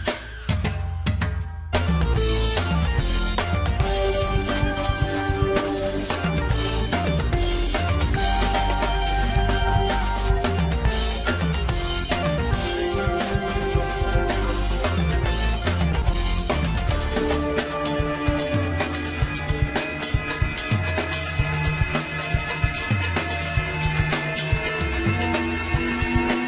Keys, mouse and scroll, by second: 0.3 ctrl+r, 2.4 ctrl+z, 3.3 click, 4.4 click, 4.9 alt+shift+click, 5.6 g, 7.5 click, 8.0 Tab, 8.2 scroll down 3, 8.5-10.0 middle drag, 10.9 scroll up 1, 11.2 scroll down 2, 11.6 middle click, 11.9-12.7 scroll up 8, 12.0 shift+middle click, 12.7 Tab, 13.0 shift+middle click, 13.4 Tab, 13.6-15.1 middle drag, 15.2 alt+shift+click, 15.7-16.1 scroll down 5, 16.2-17.2 scroll up 11, 17.2 ctrl+b, 18.6 Tab, 19.0-19.3 shift+middle drag, 19.3-19.6 scroll down 4, 19.6 Tab, 20.0 scroll up 1, 20.7 ctrl+r, 22.6 ctrl+r, 23.9 ctrl+r, 25.0-25.6 scroll down 1, 25.6 Tab, 25.9 shift+middle click.